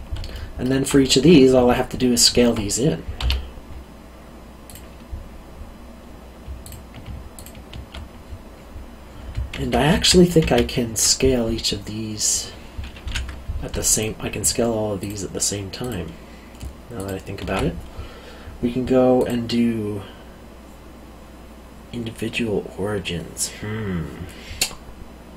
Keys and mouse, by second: 0.3 alt+middle click, 1.7 alt+middle click, 3.2 s, 4.6 click, 6.6 alt+click, 7.3 alt+shift+click, 9.5 ctrl+z, 13.0 3, 13.9 alt+click, 15.0 alt+shift+click, 19.1 click.